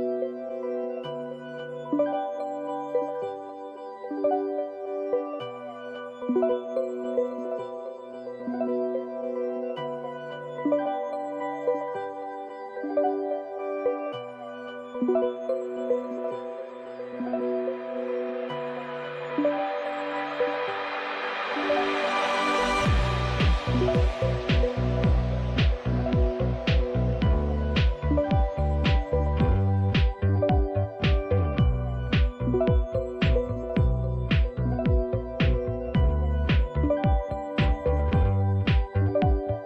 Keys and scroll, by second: 4.6 typing, 6.9 Return, 6.9 typing, 17.3 typing, 18.7-21.6 typing, 22.7 Return, 28.9 typing, 32.2 Return, 32.2-34.6 typing, 36.6-37.3 typing.